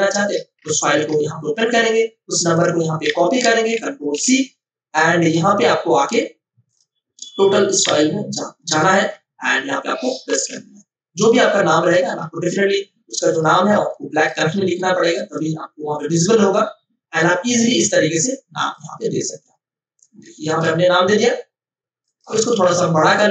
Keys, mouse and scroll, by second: 0.9 ctrl+o, 2.5 click, 3.0 F2, 4.1 ctrl+c, 5.2 click, 7.8 t, 8.7 click, 10.3 ctrl+v, 11.8-22.0 drag, 22.6 ctrl+t.